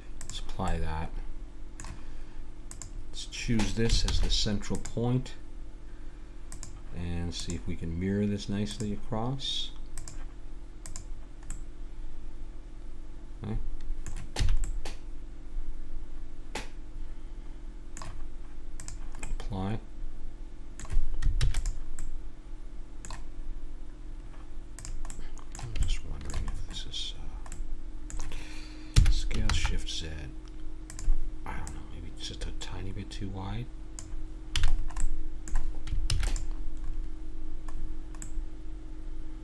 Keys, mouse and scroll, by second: 0.2 click, 1.1-2.7 middle drag, 2.7-4.5 drag, 4.1 shift+s, 6.5-9.2 drag, 10.0-11.5 drag, 11.5 middle click, 13.4-14.6 middle drag, 14.4 a, 15.6-16.6 middle drag, 18.8 click, 19.4-20.6 middle drag, 20.6 click, 20.7 middle click, 21.4 ctrl+s, 24.2 middle click, 24.8 click, 25.1-26.6 middle drag, 28.9 s, 31.6-33.5 drag, 34.6 a, 34.7-36.1 middle drag, 36.1 ctrl+s, 38.4 middle click.